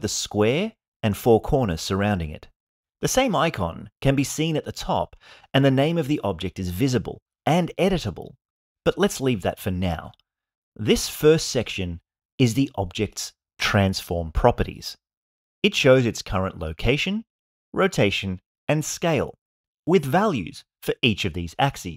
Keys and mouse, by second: 8.6-21.9 drag.